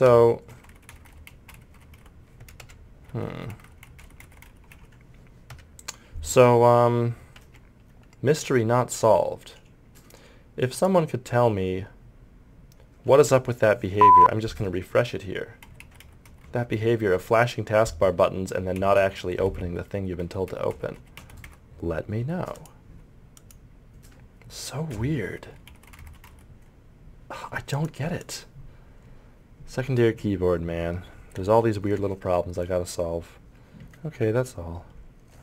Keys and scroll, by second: 0.5 Delete, 0.6 End, 0.7 Page_Down, 0.9 Home, 1.0 Page_Up, 1.1 Insert, 1.3 Delete, 1.5 Home, 1.8 Delete, 1.9 Page_Down, 2.0 Home, 3.1 Delete, 3.3 End, 3.5 Page_Up, 3.6 Home, 3.8 Delete, 4.0 End, 4.2 Page_Down, 4.2 Delete, 4.4 Page_Down, 4.5 Delete, 4.7 Page_Up, 15.7 Delete, 15.8 End, 16.0 Page_Down, 16.3 Page_Up, 16.4 Home, 16.6 Insert, 18.8 Page_Down, 19.0 End, 19.2 Delete, 19.5 Home, 19.6 Page_Up, 19.9 Delete, 20.2 End, 20.5 Page_Up, 20.7 Home, 21.0 Delete, 21.2 End, 21.5 Page_Up, 22.2 End, 24.9 Right, 25.5 Delete, 25.6 End, 25.7 Page_Down, 25.9 Insert, 26.0 Page_Up, 26.2 Delete, 26.3 End, 27.7 Page_Down.